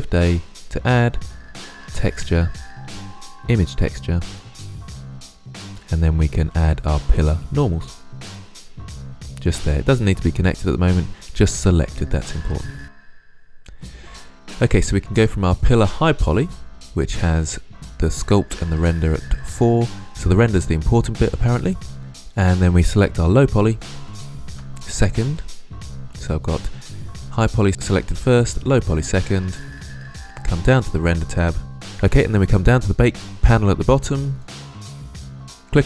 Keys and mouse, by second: 4.6-5.2 drag, 7.7-8.7 middle drag, 9.7-12.7 drag, 15.0 click, 23.4-35.6 drag.